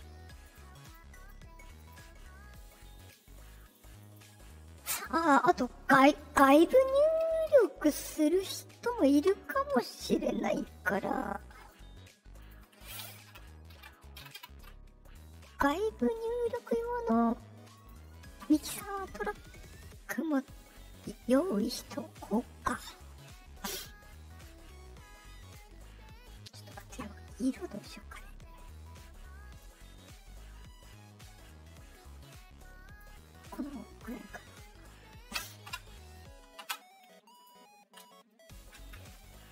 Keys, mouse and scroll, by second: 0.4 click, 0.8 click, 1.1 click, 1.7 click, 2.5 click, 2.9 click, 3.5 click, 4.0 click, 8.2 Left, 8.2 right click, 11.5 click, 12.3 click, 16.3 middle click, 16.3 scroll up 2, 17.7 click, 22.1 click, 22.6-25.4 drag, 26.2 click, 27.8-32.9 drag, 33.9 click, 36.6 Return, 37.3 click, 37.4 middle click, 38.8 Escape, 39.3 middle click.